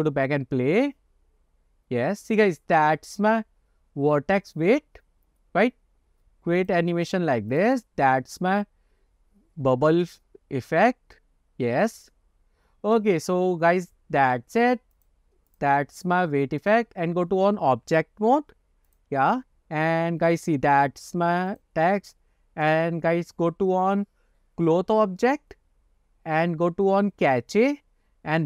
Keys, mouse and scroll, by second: 2.6 scroll down 1, 6.7 click, 7.2 click, 7.6 click, 15.1 click, 15.6 click, 16.7-19.1 drag, 21.6 click, 22.7 click, 25.4-26.5 scroll down 9, 27.3-28.4 scroll up 2.